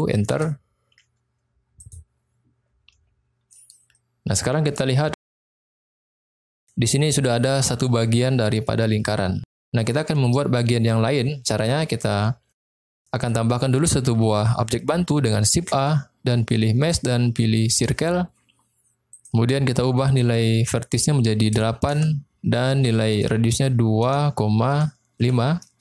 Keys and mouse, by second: 1.8 click, 4.0-4.5 middle drag, 4.9 middle click, 6.1-6.4 shift+middle drag, 12.2 middle click, 15.5 shift+a, 20.0-22.4 drag, 23.0-25.8 drag.